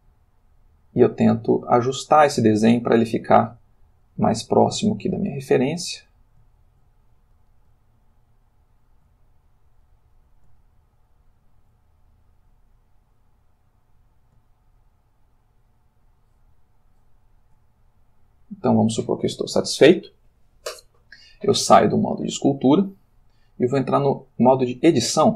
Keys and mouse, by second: 1.7-2.2 drag, 2.3 click, 2.9 shift+click, 4.7 shift+click, 6.7 shift+click, 8.0 shift+click, 8.7 shift+click, 9.3-10.0 shift+drag, 10.6 shift+click, 11.2 shift+click, 11.9 shift+click, 12.8-13.7 drag, 13.9-16.1 drag, 16.2 shift+click, 17.0 shift+click, 17.9-18.9 shift+drag, 23.6 click, 24.3 click.